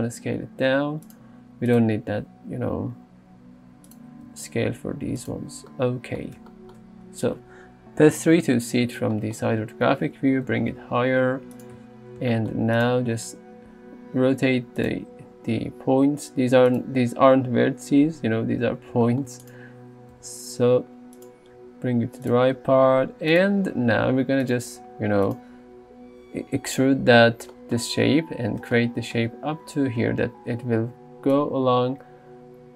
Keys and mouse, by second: 0.0 s, 1.1 click, 2.6 r, 4.3 g, 5.2 click, 7.2 Tab, 8.2 KP_3, 10.5 g, 10.8 z, 11.6 click, 11.8 Tab, 12.8 click, 13.7 r, 15.3 g, 19.5 click, 20.2 g, 21.2 click, 21.6 s, 22.3 click, 22.6 g, 23.4 click, 24.5 click, 31.0-32.7 d.